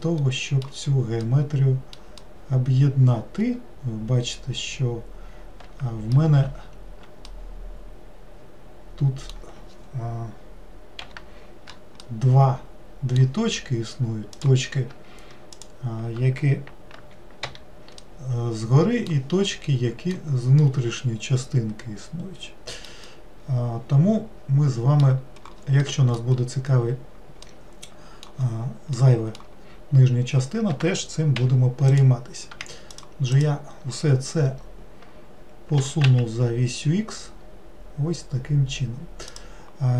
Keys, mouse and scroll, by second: 0.0-5.3 middle drag, 7.3-10.3 middle drag, 12.0-14.3 middle drag, 14.3 click, 15.5 shift+click, 17.4 j, 18.0-26.9 middle drag, 26.9-27.4 scroll down 1, 27.4-31.3 middle drag, 31.3 3, 31.9 click, 32.9 shift+click, 33.3 shift+click, 35.8 g.